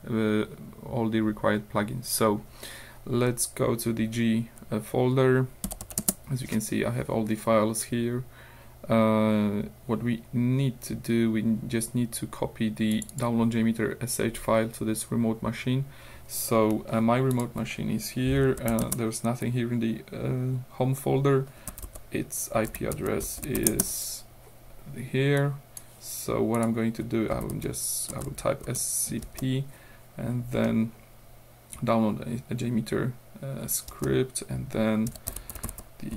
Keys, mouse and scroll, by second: 5.7 l, 6.0 Return, 7.7-8.5 scroll up 2, 8.6-9.0 scroll down 2, 12.9 click, 15.4-15.8 scroll down 2, 17.3 click, 18.4-19.3 typing, 21.5-24.1 typing, 25.4 click, 26.6 click, 27.4-29.3 typing, 30.7 click, 33.9-36.1 typing.